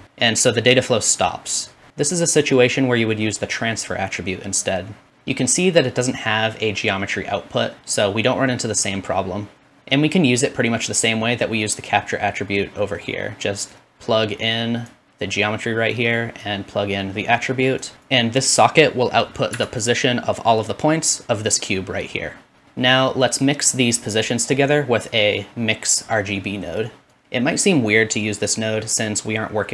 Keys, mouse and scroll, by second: 0.0-5.1 middle drag, 5.1-17.9 drag, 17.9 middle click, 18.0-19.8 drag, 19.8 middle click, 20.7-29.7 drag.